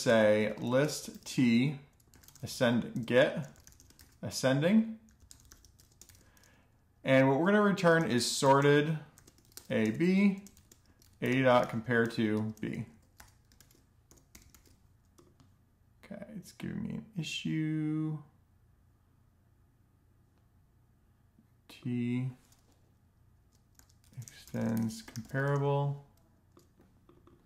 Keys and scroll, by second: 0.0-6.0 typing, 7.2-14.0 typing, 11.5 Return, 12.3 Tab, 22.8-25.3 typing, 26.9 BackSpace, 27.2 BackSpace.